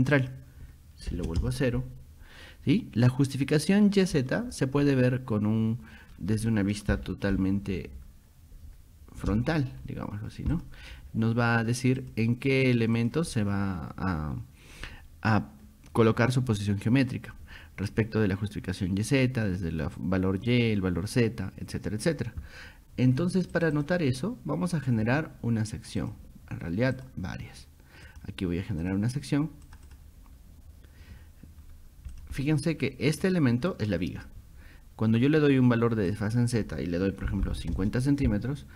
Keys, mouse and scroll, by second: 0.2 click, 6.2 middle click, 6.9-9.3 shift+middle drag, 9.5 scroll up 2, 10.6 click, 12.0 click, 12.7 click, 13.0 click, 23.6 click, 23.8 click, 26.0 click, 27.0 click, 28.1 click, 28.8 click, 29.7 click, 29.9 click, 31.7 scroll up 2, 32.1 click, 32.4 middle click, 33.2 click, 36.1 click, 38.3 scroll up 2.